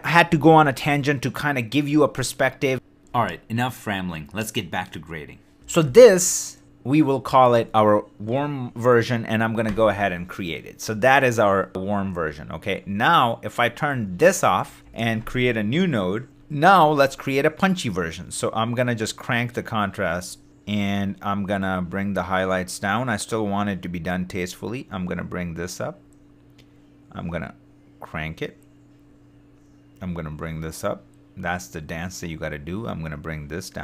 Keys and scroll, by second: 0.6 shift+d, 9.7 super+y, 14.0 super+d, 14.8 alt+super+s.